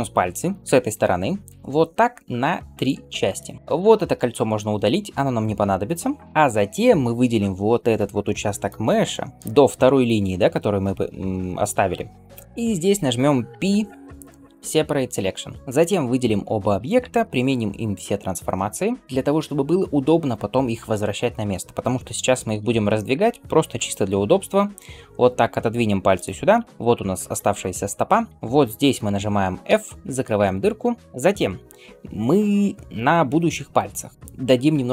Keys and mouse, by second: 1.5 ctrl+r, 3.6 alt+2, 3.6-6.6 alt+middle drag, 6.1 ctrl+x, 6.6-15.6 drag, 13.5 p, 14.9-15.7 middle drag, 15.7-22.5 drag, 17.1 ctrl+a, 22.5-28.3 shift+middle drag, 25.3 g, 27.7 Tab, 28.3-29.5 alt+drag, 29.5-34.9 middle drag, 29.5 f, 30.3 Tab.